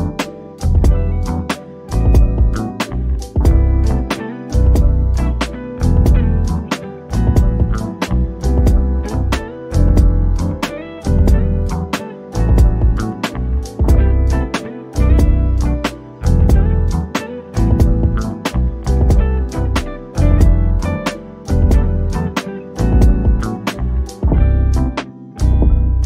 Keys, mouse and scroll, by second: 0.3 shift+click, 1.2 scroll up 1, 1.9 click, 4.4-4.8 typing, 5.0 Return, 5.7 click, 6.6-7.0 scroll down 1, 8.0 middle click, 8.9 shift+click, 9.3-10.0 scroll up 1, 10.0-11.3 middle drag, 11.3 click, 14.4 1, 15.4 Return, 17.0 shift+click, 24.1-24.6 scroll down 1, 25.8 middle click.